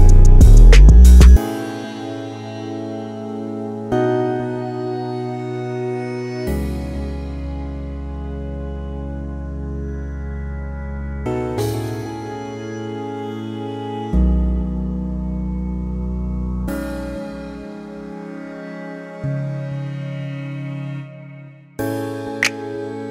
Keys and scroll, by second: 0.0-2.1 typing, 9.3 typing, 9.6 Return, 11.2-14.1 typing, 15.4-16.1 typing, 17.2-18.5 typing.